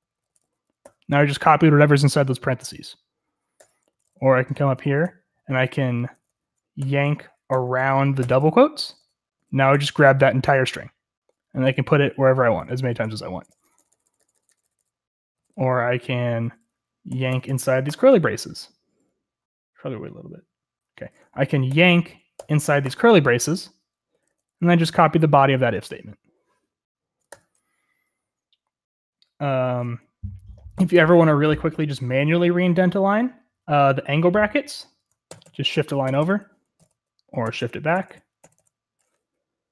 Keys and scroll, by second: 0.0-0.8 typing, 3.9-9.7 typing, 11.5-17.9 typing, 21.7-22.8 typing, 23.9-25.4 typing, 27.3 typing, 30.7-31.4 typing, 35.3-38.4 typing.